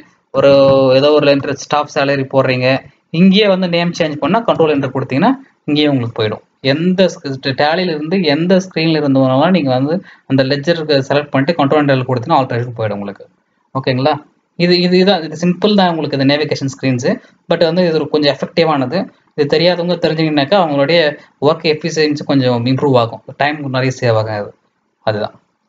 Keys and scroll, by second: 0.0-1.1 typing, 1.3 Return, 2.7 BackSpace, 4.5 ctrl+Return.